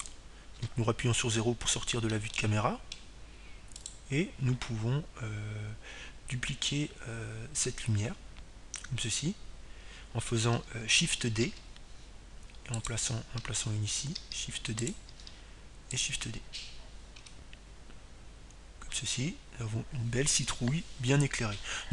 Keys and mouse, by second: 0.0-1.1 drag, 4.3 KP_0, 6.0-7.6 middle drag, 7.6-9.4 right drag, 15.2 shift+d, 16.6-18.5 drag, 18.3 shift+d, 18.8-21.9 drag, 19.1 shift+d.